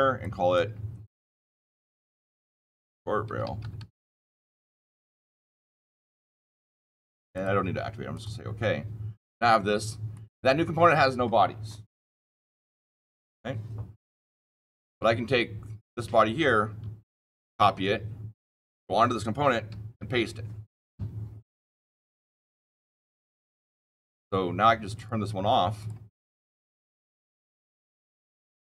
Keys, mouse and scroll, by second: 0.1 click, 1.7-4.2 typing, 7.3 click, 8.0 click, 10.0 click, 15.8 click, 17.2 ctrl+c, 18.6 click, 19.6 ctrl+v, 22.6 click, 23.3 click, 24.9 click, 25.7 click, 26.3 click, 26.8 click, 27.4-27.8 scroll down 13, 28.6 click.